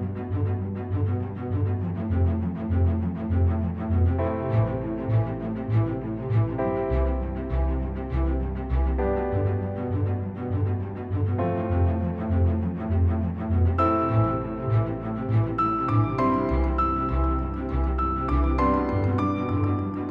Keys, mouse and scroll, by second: 0.1-0.5 scroll up 1, 0.5-0.8 drag, 5.8 drag, 7.3 v, 7.5 click, 8.8 space, 9.0 click, 9.2 space, 9.4-9.8 drag, 12.0 v, 12.2 click, 12.5 scroll down 1, 12.8 space, 12.9 click, 13.1-13.7 space, 19.5 click.